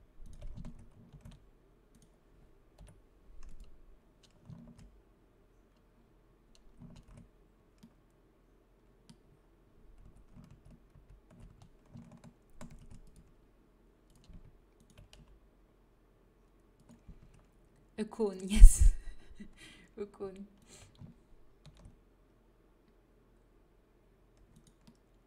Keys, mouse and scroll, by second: 1.0 ctrl+b, 2.7 Delete, 4.6 ctrl+t, 6.8 ctrl+z, 9.9 a, 10.5 ctrl+z, 10.8 ctrl+z, 11.4 a, 12.6 ctrl+r, 15.1 g, 17.1 a, 18.3 middle click, 21.5 ctrl+b.